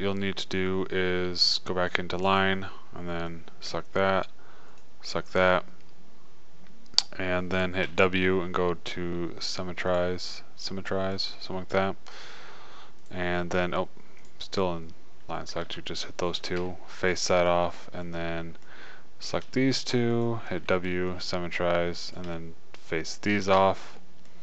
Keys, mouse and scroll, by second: 8.2 w, 13.1 click, 14.6 click, 16.9 f, 17.5 click, 20.9 w, 22.5 click, 22.8-24.4 drag, 24.0 f.